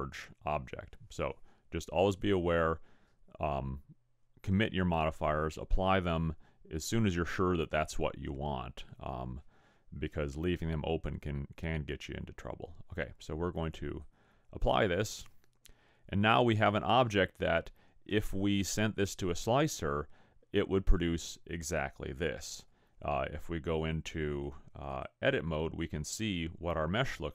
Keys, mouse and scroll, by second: 13.6 click, 15.8-16.7 scroll down 3, 16.7-17.1 scroll up 5, 17.1-18.2 scroll down 4, 18.4 middle click, 23.7 click, 25.8-26.2 scroll up 7, 26.7-27.1 scroll down 3.